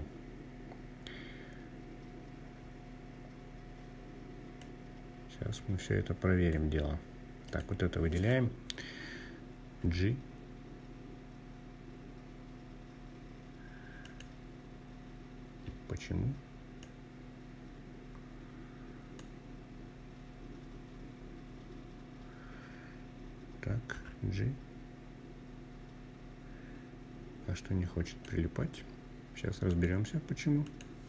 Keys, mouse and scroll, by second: 1.4-3.4 scroll up 6, 3.4-5.3 drag, 6.2 click, 8.5 g, 12.7 click, 15.5-18.0 drag, 22.6 g, 26.8 click.